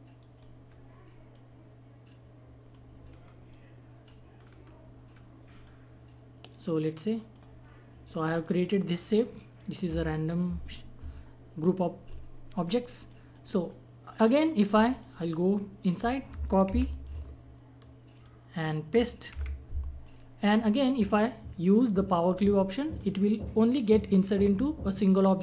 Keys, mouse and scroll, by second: 0.2 right click, 0.6 scroll up 1, 1.3 click, 1.3-3.1 drag, 3.1 scroll up 1, 3.5 click, 4.3 scroll down 1, 5.1-5.6 scroll up 1, 5.6-7.1 drag, 7.1 right click, 7.6-8.1 scroll down 1, 8.1-13.1 drag, 16.6 ctrl+c, 17.0 click, 18.1 ctrl+click, 19.3 ctrl+v, 20.3-20.9 drag, 21.1 right click, 22.1 click.